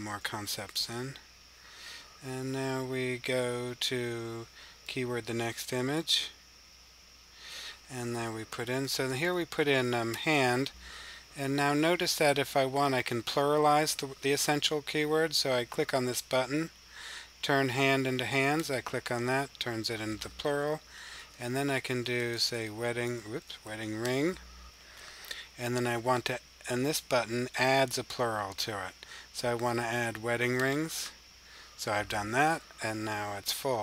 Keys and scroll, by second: 0.2-0.9 typing, 4.7 6, 7.0-7.3 typing, 8.7-9.1 typing, 21.0-23.5 typing.